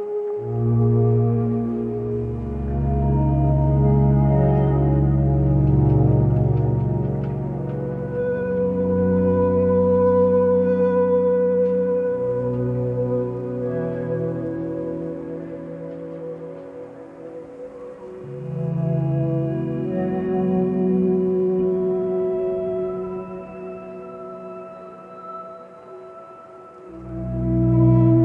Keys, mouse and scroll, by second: 11.7 p, 12.5 p, 13.2 p, 13.8 p.